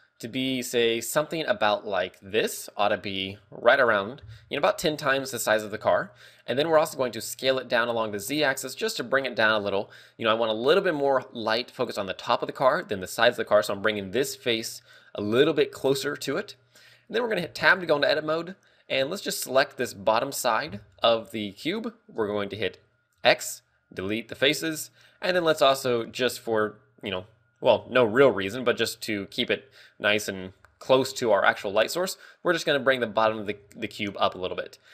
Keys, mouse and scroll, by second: 0.2 s, 4.4 click, 6.0 shift+middle click, 7.2 s, 10.1 click, 18.0 Tab, 18.6 a, 19.6 ctrl+click, 21.5 middle click, 22.7 shift+space, 32.9 scroll up 4.